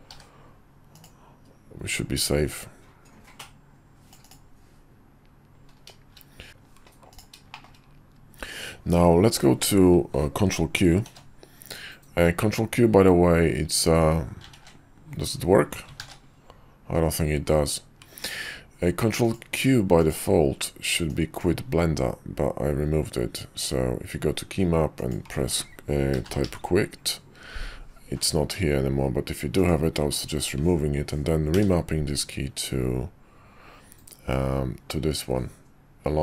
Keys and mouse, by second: 0.1 d, 2.2-4.4 drag, 7.5 shift+middle click, 11.0 ctrl+q, 14.5 ctrl+q, 16.0 ctrl+q, 19.2-20.2 drag, 31.5 q.